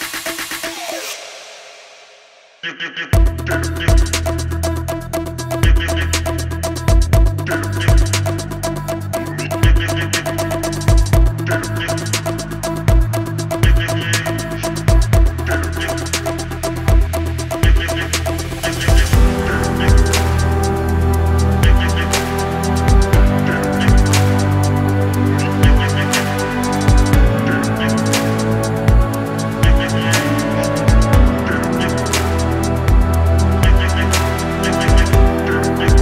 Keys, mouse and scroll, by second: 0.0-2.6 typing, 0.3 click, 0.6 click, 1.1 click, 1.4 click, 1.8 click, 2.2 click, 2.5 click, 3.5 click, 3.7 ctrl+c, 3.8-4.2 drag, 4.4 ctrl+v, 4.8-5.2 scroll up 1, 4.8 g, 6.4-6.9 drag, 7.2-7.5 drag, 8.2-8.6 scroll down 3, 8.5 scroll up 4, 8.8 middle click, 9.3 drag, 9.7-13.1 typing, 10.0 click, 10.4 click, 10.8 click, 11.6 click, 13.4-19.2 right drag, 20.2 click, 20.7 space, 29.2 space, 30.4 click, 32.3 click, 32.4 click, 32.5 click, 32.5 click, 32.7 g, 33.0 ctrl+z, 33.3 click, 33.4 click, 34.1 click, 34.4 g, 34.7 click, 35.6 n, 35.7 n, 35.9 click.